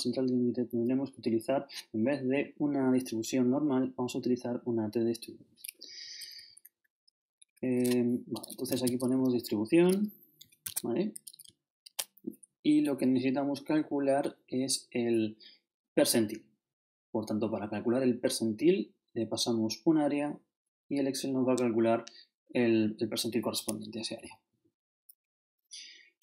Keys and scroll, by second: 5.9 shift+Down, 7.4 shift+Left, 8.4-9.6 typing, 10.6 shift+Tab, 11.9 shift+0.